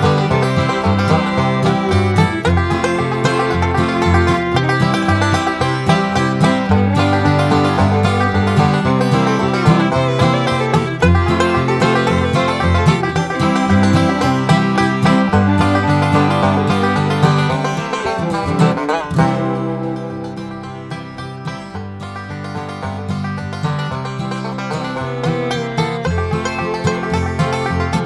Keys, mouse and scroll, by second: 0.6 right click, 1.9 click, 2.6 scroll down 1, 3.6-4.8 drag, 5.5 click, 6.4 scroll up 1, 8.6 click, 10.0 click, 11.3 click, 13.5 click, 14.0 Escape, 14.4 click, 15.8 click, 16.6 Delete, 17.2 scroll down 2, 18.4 click, 19.3 space, 20.5 click, 21.1 space, 21.5-22.9 drag, 24.0-25.2 scroll down 6, 25.8 click.